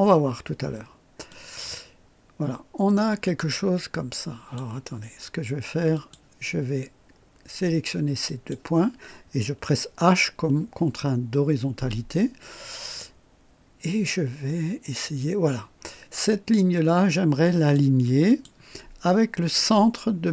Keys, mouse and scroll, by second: 1.3-4.7 drag, 5.9 click, 8.3 click, 11.8 h, 14.1-18.0 drag, 18.3 click.